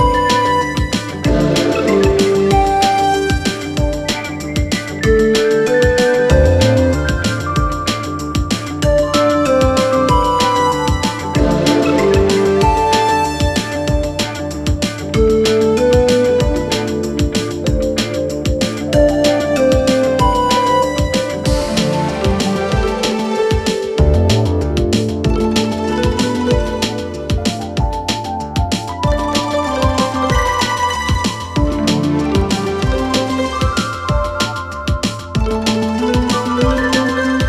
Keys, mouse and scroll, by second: 3.4 click, 6.6 click, 8.9 click, 12.2 Tab, 15.2-17.8 drag, 20.6-21.3 drag, 25.9-26.7 drag, 35.4-36.0 alt+scroll up 2, 36.0-37.0 scroll up 1.